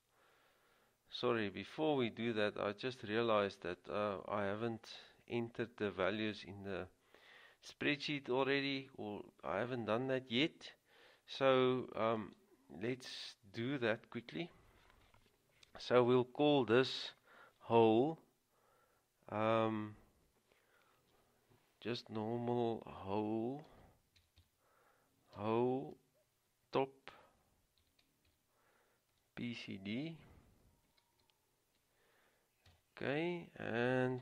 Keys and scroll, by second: 23.8-25.5 typing, 27.2-28.4 typing, 29.6 typing, 31.2-31.7 typing, 32.8 Return.